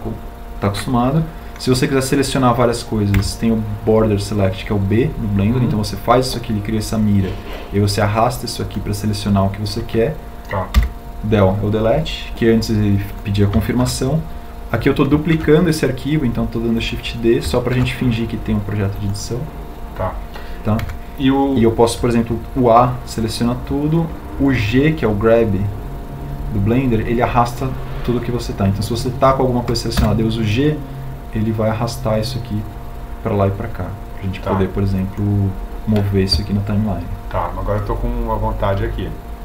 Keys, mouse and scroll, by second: 3.1 b, 11.9 Delete, 15.1 shift+d, 16.8 shift+d, 19.1 shift+d, 22.1 a, 31.7 g.